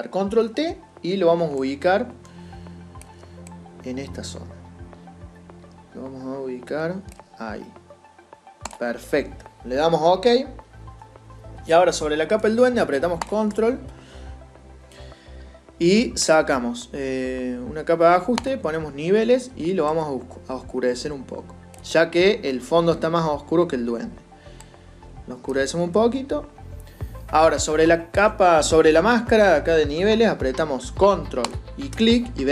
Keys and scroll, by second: 0.0 ctrl+t.